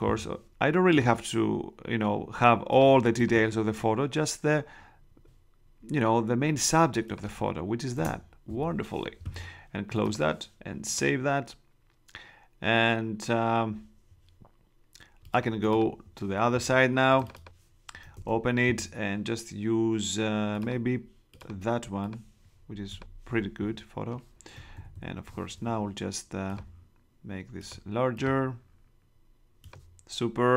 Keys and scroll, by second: 7.9 shift+Return, 18.1 super+Tab, 24.7 super+-.